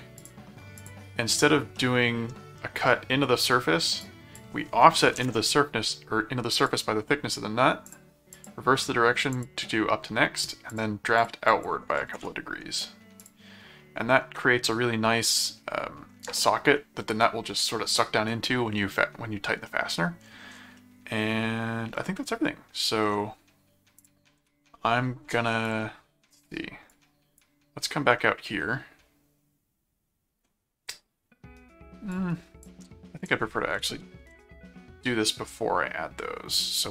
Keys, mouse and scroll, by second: 0.1 click, 0.8 click, 1.7 middle click, 2.6 middle click, 4.0 click, 6.6 click, 7.8 click, 9.3 click, 10.7 click, 13.2 click, 14.4-16.0 middle drag, 19.7 middle click, 20.7 middle click, 22.1 middle click, 24.0 click, 24.4 s, 25.7 click, 26.9 click, 28.2-30.4 middle drag, 32.1 click, 33.2 click, 34.3 s.